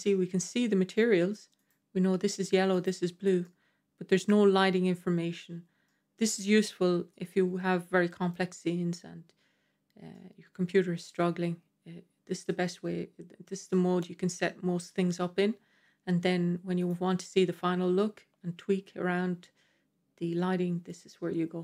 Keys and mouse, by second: 1.4 click, 2.7 click, 3.3-3.9 middle drag, 5.7-6.2 middle drag, 7.0-8.2 middle drag, 10.0-11.0 middle drag, 16.6 click, 20.7-21.6 middle drag.